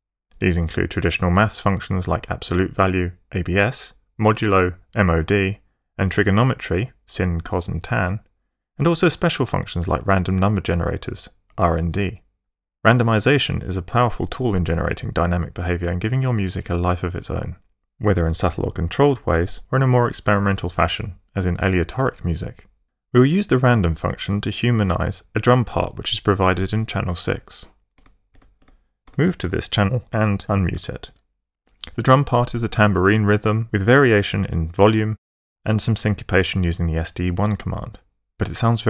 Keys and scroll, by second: 28.0 Tab, 30.7 alt+m.